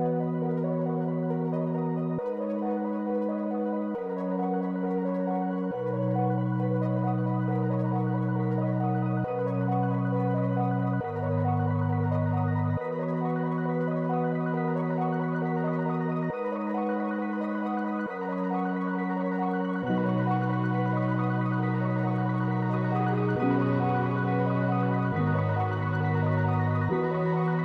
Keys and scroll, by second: 4.5 space, 5.9 space, 8.0 ctrl+d, 9.5 space.